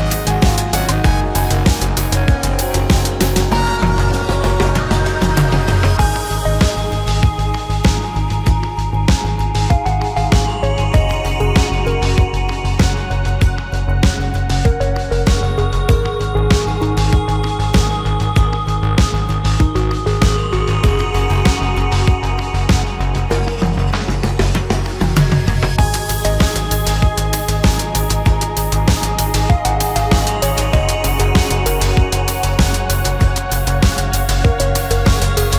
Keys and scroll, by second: 0.5 space, 1.5 l, 3.4 p, 4.8 space, 4.9 Escape, 11.9 f, 16.5 shift+space, 18.5 p, 22.8 space, 23.8 Delete.